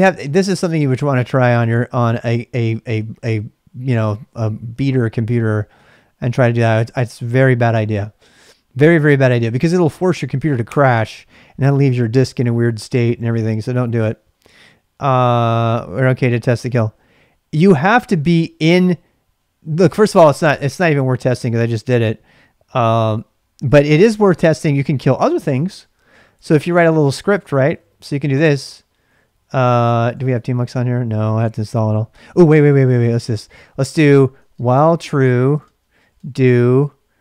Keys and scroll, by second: 23.0-24.1 BackSpace, 26.1-37.2 typing.